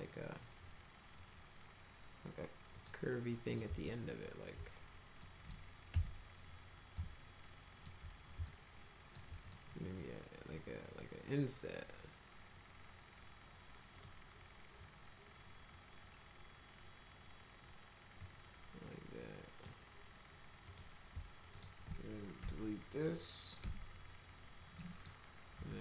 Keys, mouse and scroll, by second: 2.7 click, 3.5 click, 3.9 alt+middle click, 5.2 middle click, 5.9 F4, 6.9 alt+middle click, 8.4 alt+middle click, 9.4 right click, 13.9 click, 18.2-19.6 drag, 20.7 click, 21.5 ctrl+click, 23.6 Delete, 23.9 click, 24.8 middle click, 25.6 1.